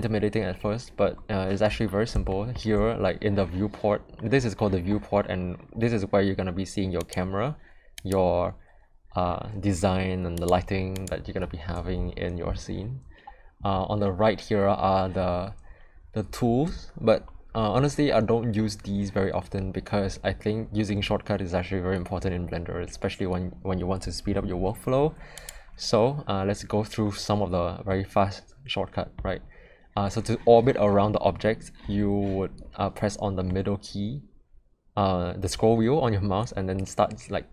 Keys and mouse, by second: 2.3 shift+middle click, 6.9 click, 8.0 click, 10.3 click, 10.9 click, 27.9-29.1 middle drag, 33.4-37.5 middle drag.